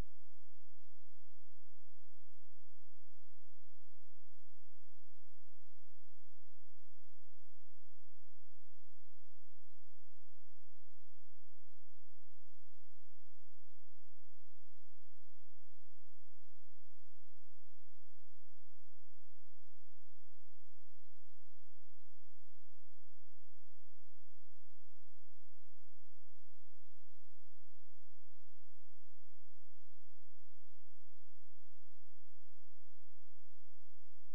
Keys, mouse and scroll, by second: 0.2 click, 4.4 space, 4.8 click, 13.8 F12, 15.0 click, 20.4 click, 22.8 right click, 24.3 scroll down 1, 24.6-25.6 scroll up 1, 25.8 shift+Page_Down, 29.7 click.